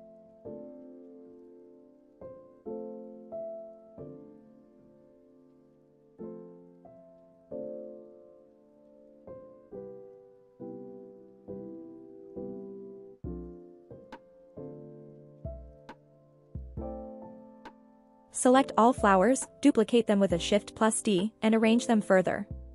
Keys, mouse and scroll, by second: 0.3 middle drag, 0.9 r, 1.1 y, 3.5 click, 3.8 middle drag, 4.1 click, 4.7 r, 4.9 y, 5.8 y, 7.2 click, 7.6 click, 7.9-8.4 middle drag, 8.5 r, 8.7 y, 9.6 y, 11.3 click, 11.6-12.0 middle drag, 12.2 click, 12.6-13.0 middle drag, 13.3 r, 13.5 y, 13.8 y, 16.4 click, 16.8-18.1 scroll down 2, 17.0 middle click, 18.9 shift+click, 19.3 click, 19.5 middle click, 20.3 shift+click, 20.7 shift+click, 21.0-21.6 middle drag, 22.3 KP_1.